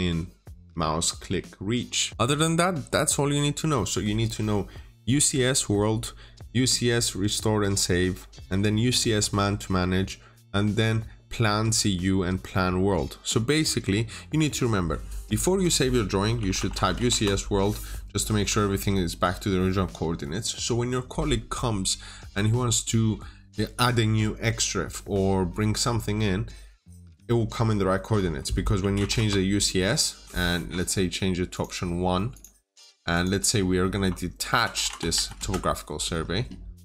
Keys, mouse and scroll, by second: 16.2 click, 16.4-16.8 typing, 16.6 Return, 17.0 Return, 18.2-19.1 scroll down 1, 19.1-19.6 scroll up 1, 19.6 middle click, 28.8 typing, 29.0 Return, 31.4 click, 32.7-33.0 scroll up 1, 33.0 click, 34.3-35.0 typing, 35.2 Return.